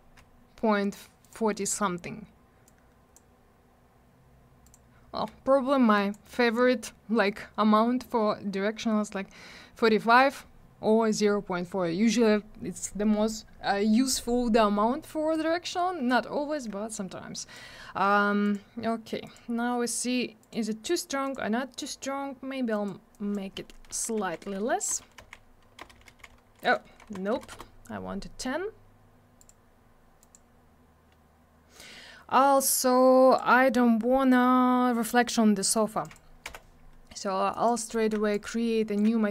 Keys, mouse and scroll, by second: 1.2 click, 1.3 click, 2.7 click, 4.6 click, 4.7 click, 6.0 click, 6.1 click, 15.4 click, 17.3 click, 17.5 click, 18.4 click, 18.5 click, 19.3 click, 19.4 click, 20.4 click, 20.5 click, 21.3 click, 21.4 click, 22.8 click, 22.9 click, 23.1 click, 24.2-26.1 typing, 27.4 BackSpace, 27.5 Return, 29.0 click, 29.4 click, 29.5 click, 30.2 click, 30.3 click, 32.6 click, 36.0 click, 36.1 click, 36.5 m, 37.5 click, 37.7 click, 37.8 middle click, 37.9 middle click, 38.3 shift+click.